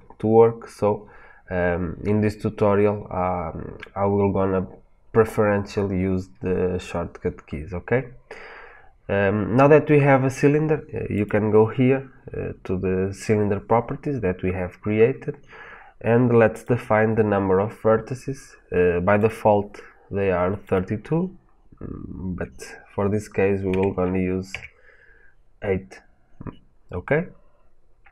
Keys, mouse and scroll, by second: 16.4-19.1 drag, 20.5-28.1 drag, 24.4 KP_Enter, 28.0-28.1 scroll up 2.